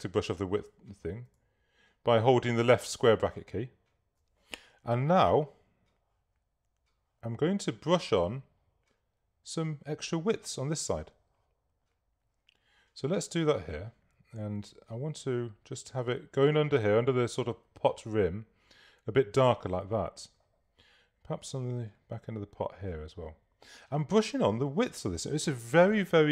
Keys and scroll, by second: 0.7 [.